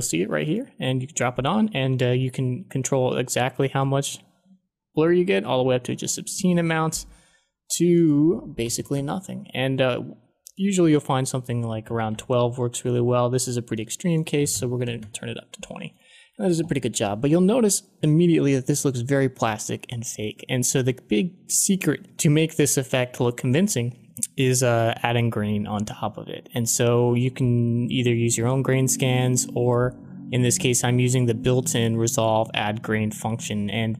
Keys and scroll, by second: 8.6 1, 8.9 Return, 10.8-12.3 typing, 14.1-15.1 typing.